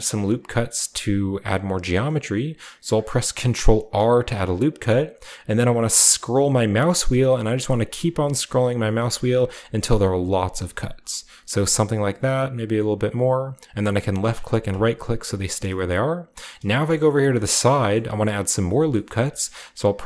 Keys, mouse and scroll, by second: 0.7-2.3 shift+middle drag, 3.5 ctrl+r, 5.7-17.9 scroll up 1, 17.9-18.9 shift+middle drag, 18.5-20.0 shift+scroll up 2, 19.1-20.0 shift+middle drag.